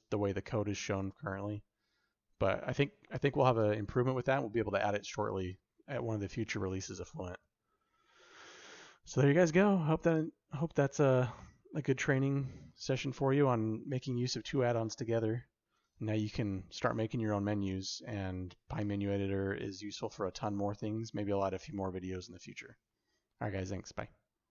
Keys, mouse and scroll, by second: 8.4 click, 9.7 middle click, 10.9 middle click, 12.7-13.9 shift+middle drag, 13.9 scroll up 1, 14.1 middle click, 14.6 shift+middle click.